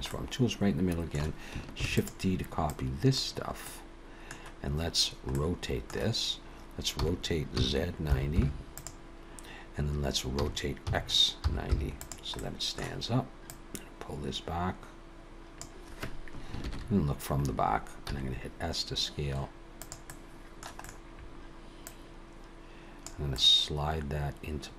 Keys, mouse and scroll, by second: 0.1 middle click, 1.8 shift+d, 2.7 click, 3.7 middle click, 5.2 middle click, 7.0 r, 10.4 r, 12.4 middle click, 13.5 click, 16.6 ctrl+KP_1, 18.1 s, 20.1 middle click, 20.8 middle click, 20.9-21.8 scroll up 2, 21.8 click, 23.3 middle click.